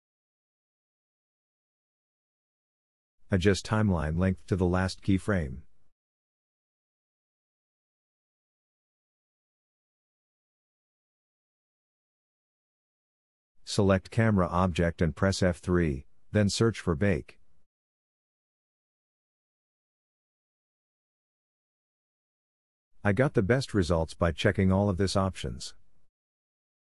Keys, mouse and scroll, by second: 6.5 middle click, 6.9 Tab, 8.4 shift+middle click, 11.9 F3, 16.8-25.5 middle drag.